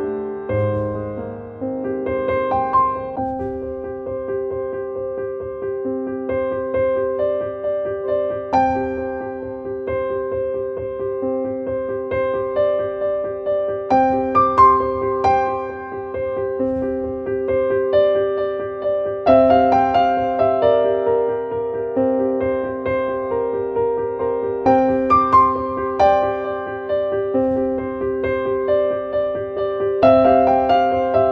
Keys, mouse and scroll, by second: 3.3-7.7 drag, 8.9-10.8 scroll down 1, 11.2-12.8 drag, 13.3-14.8 drag, 15.8-19.4 drag, 22.6-24.0 drag, 26.7 click.